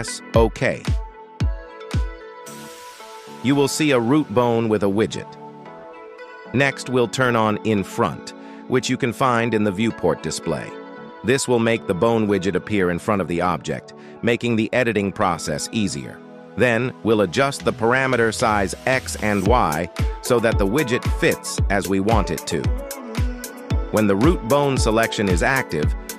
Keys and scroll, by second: 13.0 n.